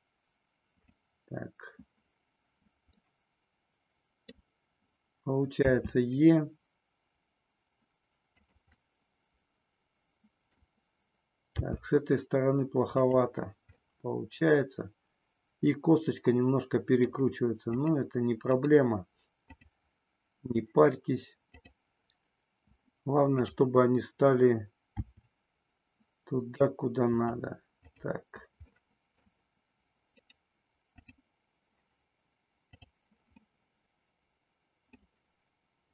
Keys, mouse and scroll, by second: 0.7 click, 3.0-4.5 middle drag, 5.6 e, 8.9-10.7 middle drag, 11.6 g, 13.1 click, 13.9 scroll up 1, 14.0-17.3 middle drag, 17.7 click, 21.6 click, 23.2 click, 24.9 e, 27.2 click, 28.7 middle click, 32.9 click, 33.6-35.2 middle drag.